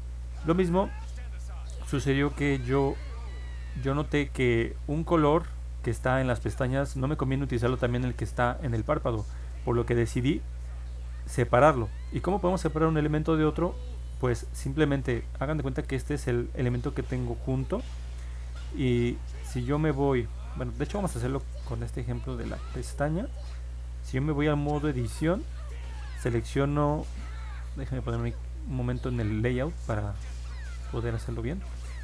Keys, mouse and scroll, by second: 3.3 ctrl+Tab, 4.7 alt+z, 7.7 click, 11.0 click, 12.3-14.6 drag, 18.6 ctrl+Tab, 21.7 click, 23.4 ctrl+Tab, 27.9 click, 29.4 ctrl+Tab, 30.9 middle click.